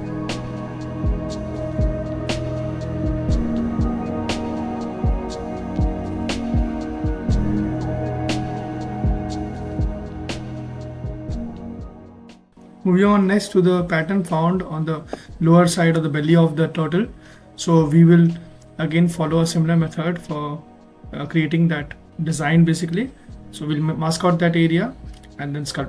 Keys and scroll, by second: 1.5 ctrl+z.